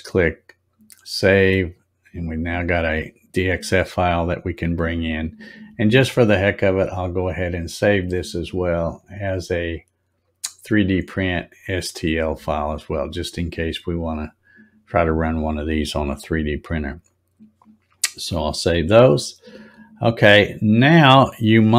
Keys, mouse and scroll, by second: 1.6 click, 7.3 click, 11.2 click, 16.9 click, 19.9 scroll up 4.